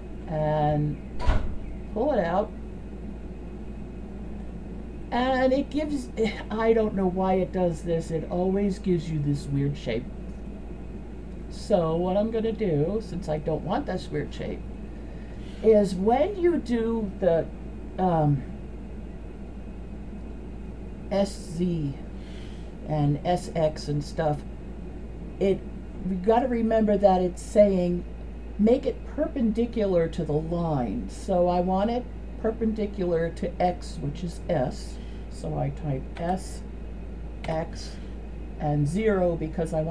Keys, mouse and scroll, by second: 4.5-5.1 middle drag, 5.3-6.5 middle drag, 6.9-10.5 middle drag, 12.9 click, 14.4 middle click, 36.2 s.